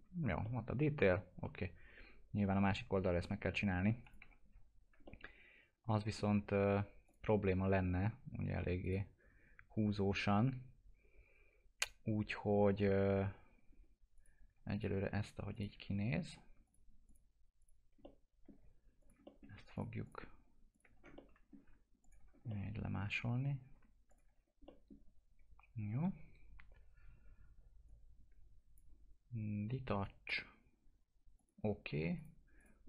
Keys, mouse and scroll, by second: 0.1 scroll down 1, 0.4-4.0 alt+middle drag, 4.0 click, 4.2 F4, 5.0-7.1 alt+middle drag, 7.1 click, 13.7 scroll up 1, 14.2 click, 14.7 ctrl+click, 16.1-16.5 scroll up 1, 16.6 ctrl+click, 18.0 alt+middle click, 19.0 ctrl+click, 19.2 alt+middle click, 19.7 ctrl+click, 20.9 scroll down 1, 21.2 alt+middle click, 22.0 ctrl+click, 22.2 scroll down 1, 22.5 alt+middle click, 23.3-23.7 scroll up 1, 24.1 ctrl+click, 24.3 scroll down 1, 24.7 middle click, 25.0 scroll down 1, 27.9 click.